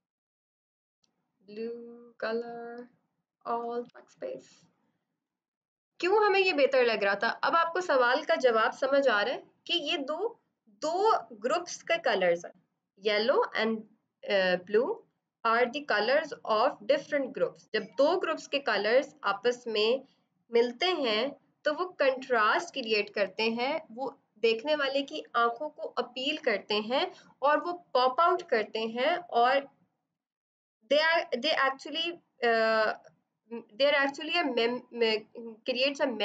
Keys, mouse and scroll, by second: 0.2 click, 3.8 alt+BackSpace, 5.2 ctrl+d, 7.1 click.